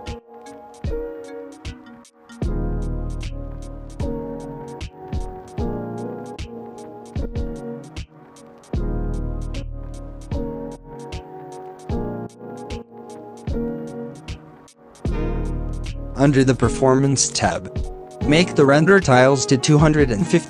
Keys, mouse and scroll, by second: 1.8-4.1 drag, 4.1 KP_0, 4.5 click, 4.9 KP_0, 6.1-7.6 drag, 8.9-10.9 drag, 10.9 KP_0, 11.6 click, 12.1 KP_0, 13.3-14.9 drag, 15.7-17.0 drag, 17.0 scroll down 4, 17.7-19.4 drag, 19.4 middle drag, 19.5 scroll up 4, 19.7 KP_1.